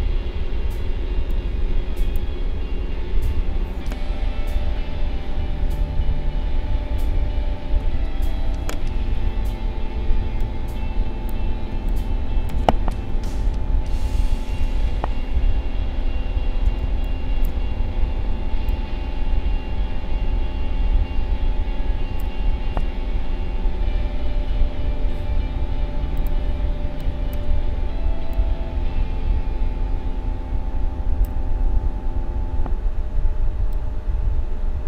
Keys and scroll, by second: 11.7 space, 16.8 space, 26.6 space.